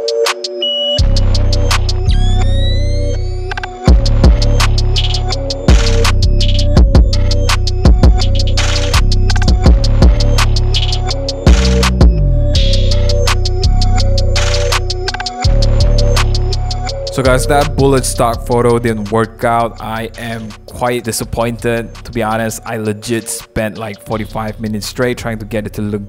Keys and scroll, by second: 0.8 s, 2.0 super+z, 2.3 super+=, 2.4 super+0, 2.5 super+-, 2.7 super+-, 2.7 super+1, 4.0 super+-, 4.2 super+-, 7.3 0, 11.5 0, 12.3 0, 13.4 0, 21.0 0, 25.4 0.